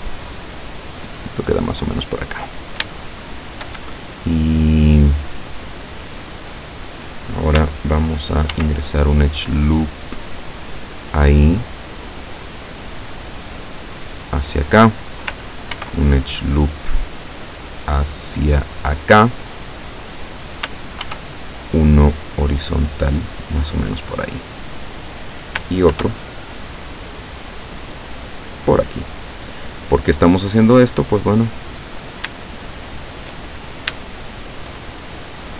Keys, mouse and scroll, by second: 3.0 shift+middle click, 8.6 ctrl+r, 10.8 click, 13.8 click, 15.8 ctrl+r, 17.4 click, 19.6 click, 21.1 ctrl+r, 21.8 click, 23.9 click, 25.9 ctrl+r, 26.8 click, 28.6 click, 31.0 middle click, 32.0 right click, 32.5 shift+right click, 33.0 shift+right click, 33.6-34.0 shift+scroll up 1, 34.1 shift+middle click.